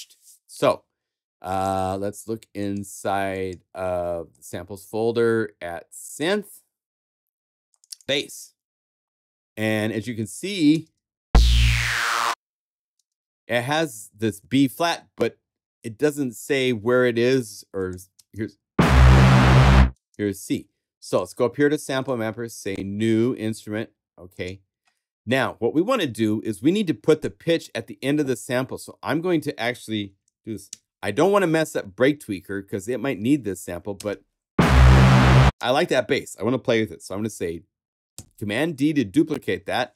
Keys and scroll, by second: 10.7 space, 12.9 space, 18.1 space, 19.9 space, 38.1 super+d.